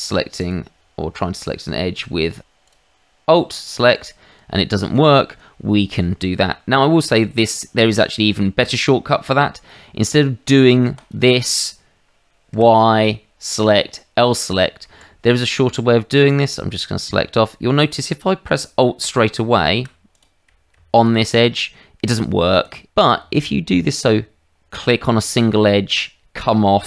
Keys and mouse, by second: 0.4 click, 2.6 alt+click, 3.9 alt+click, 4.8 alt+click, 7.8 click, 10.9 click, 12.5 y, 14.8 Escape, 16.1 click, 19.0 alt+click, 20.1 click, 20.9 alt+click, 22.6 click, 24.7 click.